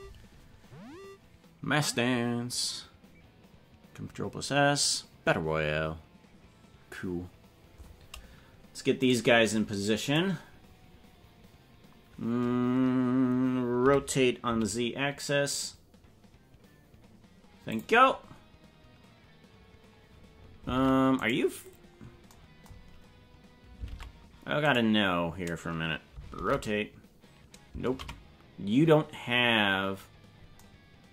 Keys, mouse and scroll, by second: 9.1 right click, 10.1 right click, 13.8 r, 20.8 ctrl+Tab, 21.2 right click, 22.9 scroll down 5, 23.9 ctrl+Tab, 24.7 right click, 26.4 alt+r, 28.1 ctrl+z.